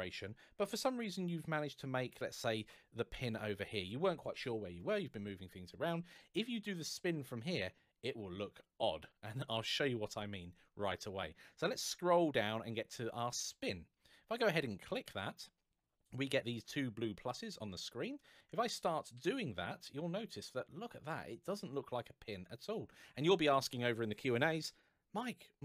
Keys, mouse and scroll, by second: 0.7 middle click, 0.7 shift+g, 1.9 click, 11.4-13.0 scroll down 1, 14.6 click, 17.3 middle click, 18.6 click.